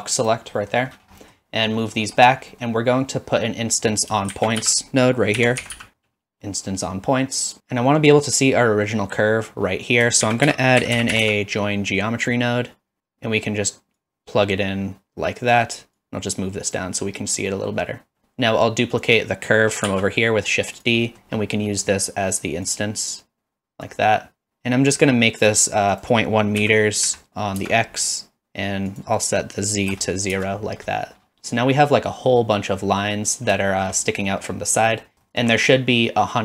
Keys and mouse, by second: 0.2 click, 0.6 middle click, 1.3 middle click, 1.8 middle click, 4.3 shift+a, 7.6 x, 10.2 shift+a, 14.0-15.5 drag, 16.0-16.8 drag, 17.5 middle click, 19.0 click, 19.9 shift+d, 20.8 click, 21.2 middle click, 21.7 middle click, 22.7-23.9 drag, 26.1-28.2 drag, 29.0-30.9 drag, 33.8 shift+middle click, 35.0 middle click, 35.3 shift+middle click.